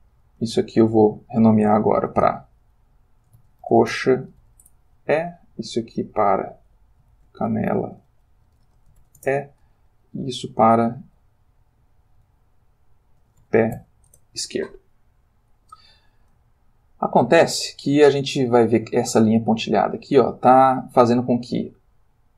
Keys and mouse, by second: 0.7 ctrl+click, 2.0 F2, 3.4-4.4 typing, 4.6 shift+Return, 5.6 click, 6.7 F2, 7.2-9.0 typing, 9.2 Return, 10.0 click, 11.8 F2, 13.2 shift+p, 13.4 shift+e, 14.1 shift+Return, 16.6-17.7 ctrl+middle drag, 22.0 click.